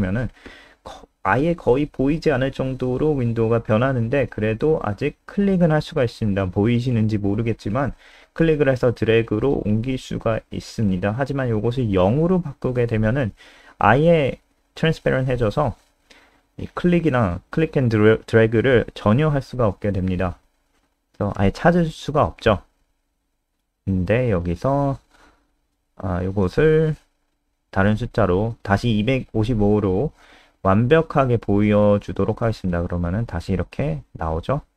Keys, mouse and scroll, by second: 1.7 F5, 4.3 click, 12.1 Up, 12.3 BackSpace, 12.6 0, 12.7 ctrl+s, 17.1 Return, 18.0 click, 20.2 BackSpace, 21.0 click, 21.7 Up, 21.8 Up, 21.9 Up, 22.1 Right, 22.5 Down, 22.6 Right, 22.9 BackSpace, 23.3 ctrl+s, 23.7 F5, 30.4-31.6 typing, 31.8 F5, 33.3 click.